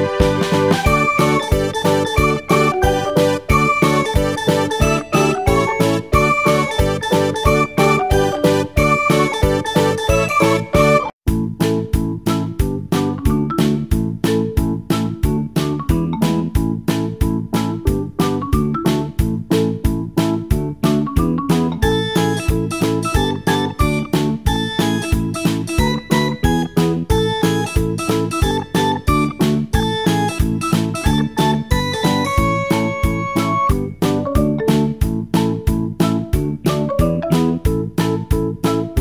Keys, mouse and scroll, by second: 3.3-9.8 drag, 11.4-14.3 drag, 32.7-36.0 drag, 36.9-39.0 middle drag.